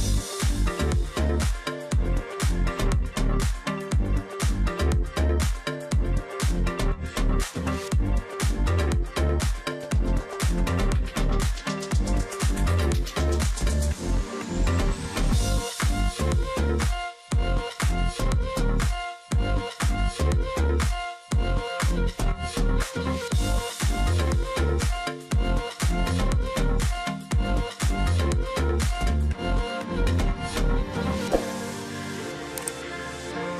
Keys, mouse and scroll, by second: 0.1 ctrl+click, 0.9 alt+scroll up 1, 2.3 double click, 2.9 shift+click, 3.7 double click, 3.9 alt+scroll down 1, 4.2 alt+scroll up 1, 4.3 space, 5.8 alt+scroll up 1, 6.5-7.0 alt+scroll up 1, 8.4 space, 10.3 ctrl+z, 13.9 space, 19.0 space, 22.2 ctrl+click, 22.6 shift+x, 22.9 ctrl+click, 23.1 alt+scroll down 1, 23.3-23.6 alt+scroll up 1, 23.6 space, 24.3 ctrl+click, 25.9 alt+scroll down 1, 26.0 space, 26.4-27.0 alt+scroll up 1, 27.4-27.9 alt+scroll up 1, 28.1 space, 31.6 alt+click, 32.8 ctrl+click.